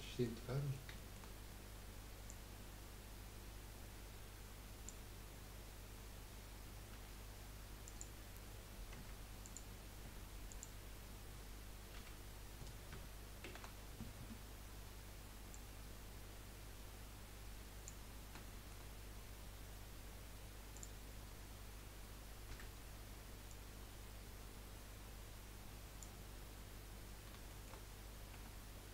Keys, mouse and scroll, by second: 2.3 click, 6.9 p, 8.5 scroll up 2, 9.0 Tab, 9.4 click, 10.0 Tab, 10.5 click, 12.0 l, 13.4 shift+d, 15.5 click, 18.4-20.7 shift+middle drag, 20.7 click, 22.5 l, 23.5 click, 27.0-27.5 scroll down 1, 27.5 shift+middle click, 28.3 Tab.